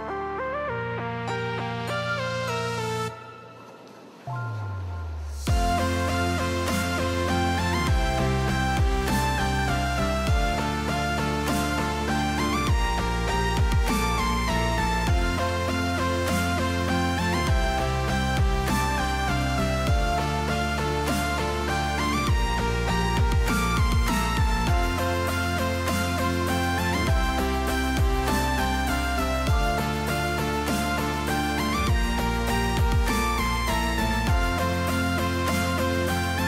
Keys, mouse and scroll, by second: 0.4 click, 1.2 shift+middle click, 4.3 click, 5.4 click, 6.8 click, 7.8 middle click, 10.4 g, 13.3 Tab, 16.0 alt+a, 17.4-18.6 middle drag, 19.2 click, 19.6-20.7 drag, 21.4 click, 22.1 click, 22.8-23.5 drag, 24.7 middle click, 25.1 middle click, 25.9 middle click, 26.3-27.9 drag, 27.9 right click, 28.0 middle click, 28.1 right click, 28.5 middle click, 29.3 middle click, 33.6-36.4 drag.